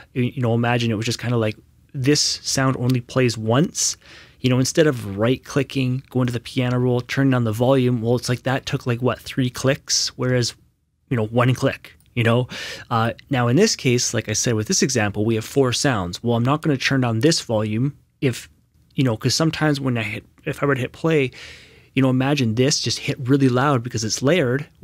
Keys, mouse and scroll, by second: 5.5 click, 5.5 right click, 6.2 click, 8.2 right click, 8.4 Escape, 11.4 Escape, 11.5 click.